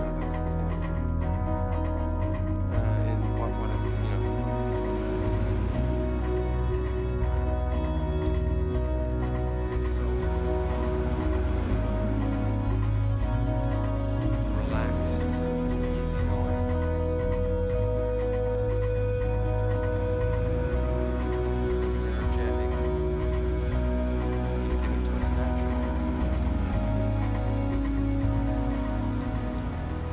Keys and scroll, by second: 0.8 Return, 3.5 super+-, 4.1 super+t, 4.4 super+=, 5.6 super+t, 6.4 super+-, 8.0 super+-, 9.0 super+-, 11.3 super+t, 11.8 super+h, 12.3 super+-, 13.1 super+-, 13.5 super+t, 23.9 super+-.